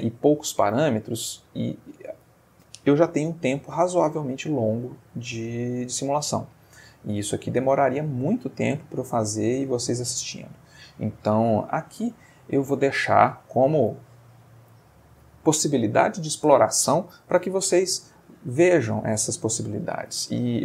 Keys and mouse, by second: 2.2-2.8 middle drag, 3.2-3.8 ctrl+middle drag, 4.9-5.6 shift+middle drag, 5.7-8.0 shift+middle drag.